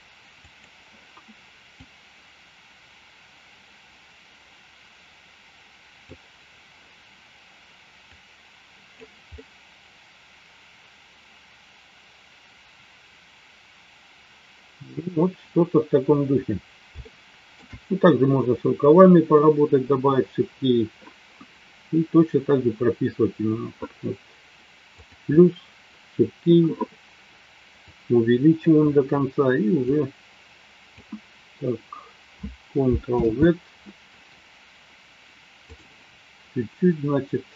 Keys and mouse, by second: 2.0-6.4 drag, 8.1 click, 9.3-14.9 middle drag, 17.0 shift+middle click, 27.8 click, 29.8-30.9 drag, 33.4 ctrl+z.